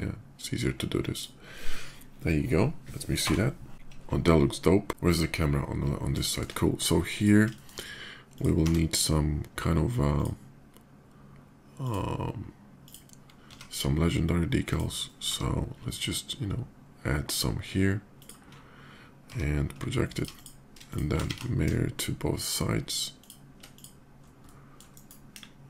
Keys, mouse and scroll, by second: 0.9 shift+middle click, 3.1 KP_0, 3.7 KP_0, 6.0 shift+middle drag, 6.9 shift+click, 7.3 shift+middle click, 8.1 shift+click, 8.3 d, 9.9 click, 11.6 click, 12.6 click, 14.4 click, 14.4 s, 17.9 ctrl+click, 19.1 d, 19.8 alt+d, 19.9 alt+click, 20.1 alt+click, 20.6 shift+click, 22.2 alt+shift+x, 22.2 click, 22.9 click, 23.5-23.9 shift+drag, 24.2 shift+middle drag, 24.7 shift+right click, 25.1 KP_5, 25.5-25.6 middle drag.